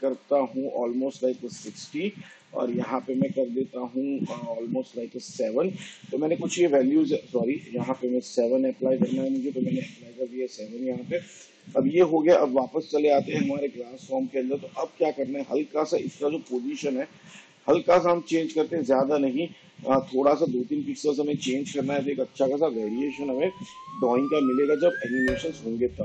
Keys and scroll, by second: 1.2 6, 5.1 7, 9.3 7, 16.4 p.